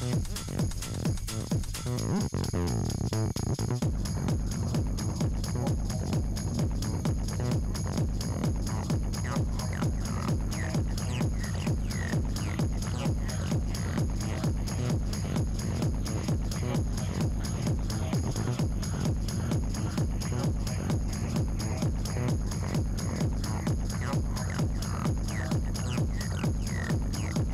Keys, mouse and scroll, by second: 5.3-6.8 drag, 18.3 ctrl+s, 20.0 b, 21.2 n, 21.7 scroll up 3, 22.5 scroll down 3, 22.8-24.3 middle drag, 24.3-25.0 scroll up 10, 25.0 scroll down 2, 25.5 click, 26.1 Tab, 26.9 scroll down 3.